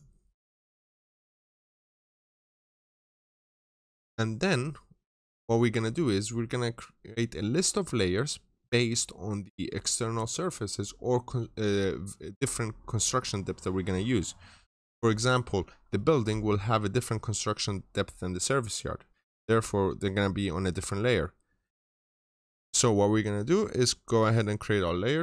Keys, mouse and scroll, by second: 3.1 double click, 3.4 middle click.